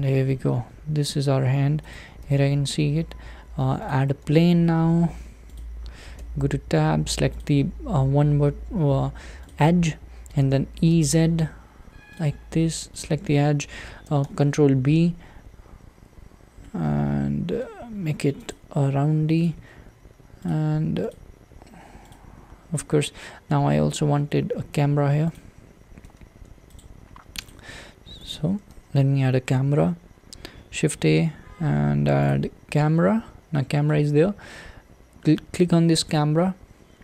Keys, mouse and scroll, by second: 0.1-1.9 middle drag, 1.9 shift+right click, 3.9 shift+a, 4.2 s, 6.2 Tab, 7.4 click, 8.5 2, 9.5 click, 10.4 e, 13.0 click, 14.2 b, 19.5 click, 20.4 click, 21.3 click, 22.2 click, 22.7-23.9 middle drag, 23.9-25.4 scroll up 3, 25.4 click, 26.0 Tab, 27.5 click, 27.8-28.3 scroll down 3, 28.3 click, 32.8-33.5 scroll down 2, 33.5-36.1 middle drag, 36.1 click.